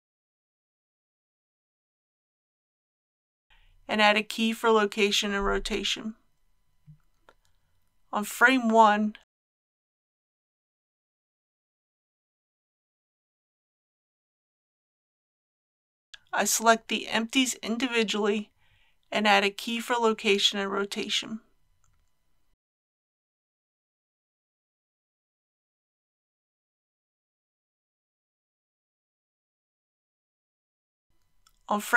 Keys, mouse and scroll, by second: 2.8 click, 4.1 i, 4.9-11.7 drag, 12.4 KP_3, 12.7 scroll up 1, 13.0 shift+middle click, 13.6 click, 13.8 scroll up 1, 14.1 shift+middle click, 14.8 scroll down 1, 15.5 middle click, 16.8 click, 20.4 i, 21.4-31.9 drag, 27.9 i.